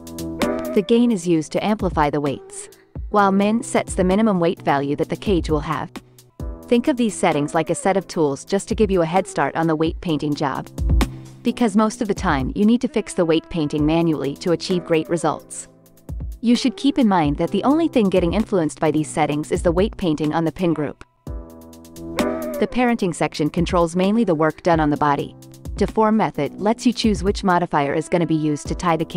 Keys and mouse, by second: 4.2 ctrl+Tab, 5.1 KP_Divide, 6.2 ctrl+Tab, 7.1 x, 7.9 KP_Divide, 9.1 ctrl+Tab, 10.2-12.1 drag, 12.4 ctrl+Tab, 19.0 KP_Divide, 20.1 ctrl+Tab, 20.7 x.